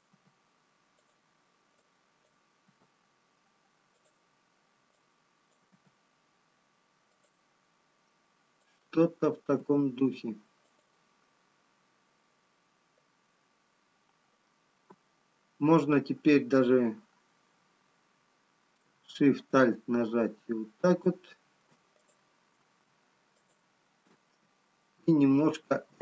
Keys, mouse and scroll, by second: 1.2 g, 2.4 click, 3.6 g, 6.4 g, 9.8 click, 9.8 g, 24.6 alt+shift+click.